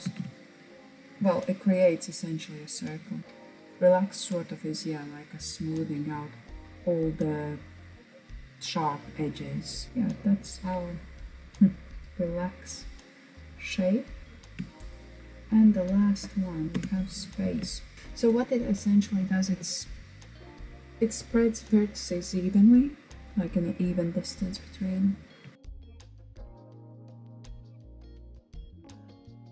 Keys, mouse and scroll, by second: 3.4-6.4 drag, 6.4-8.4 middle drag, 9.8 click, 9.9-10.5 middle drag, 11.6 right click, 11.9-12.4 scroll down 2, 12.4-14.4 middle drag, 14.4 click, 16.3 Tab, 16.6 Tab, 16.9-17.9 shift+middle drag, 17.9 click, 23.8 alt+click, 24.8-25.1 scroll down 2, 25.1 middle click, 25.8 click, 26.4 shift+click, 26.7 g, 27.3 click, 27.6 g, 28.3 space, 28.9 click.